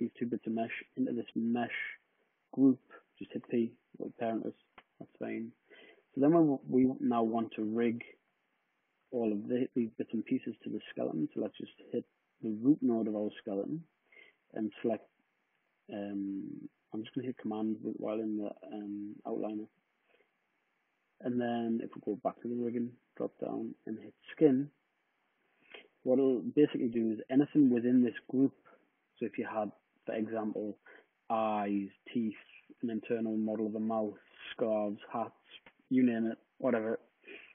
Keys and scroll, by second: 3.1 p.